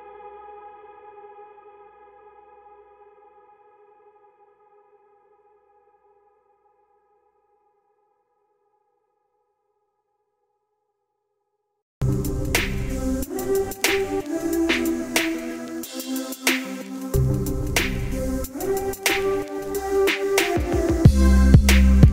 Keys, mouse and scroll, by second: 7.8 shift+Num_Lock, 7.9 shift+click, 8.6 ctrl+g, 10.4 click, 10.8 alt+click, 11.3 alt+click.